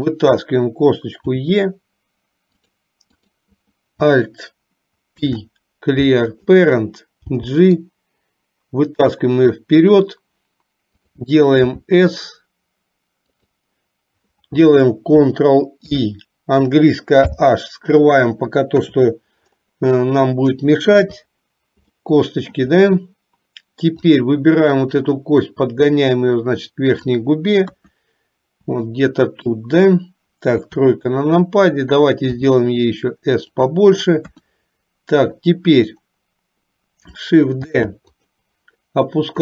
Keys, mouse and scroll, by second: 0.2 click, 1.4 e, 3.4 click, 5.2 alt+p, 7.5 g, 11.6 s, 16.0 ctrl+i, 17.4 h, 18.9 KP_1, 21.1 KP_3, 22.0 shift+middle click, 24.1 click, 25.7-27.3 drag, 27.9 KP_1, 29.0 shift+middle click, 30.6 KP_3, 32.4 s, 34.4 KP_1, 37.9 shift+d.